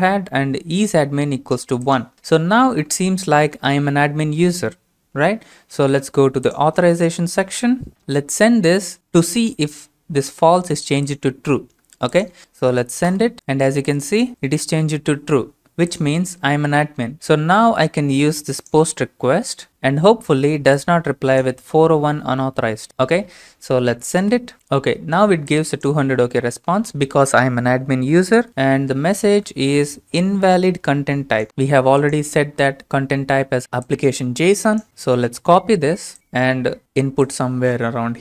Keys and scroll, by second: 13.1 ctrl+space, 24.2 ctrl+space, 35.3 ctrl+c.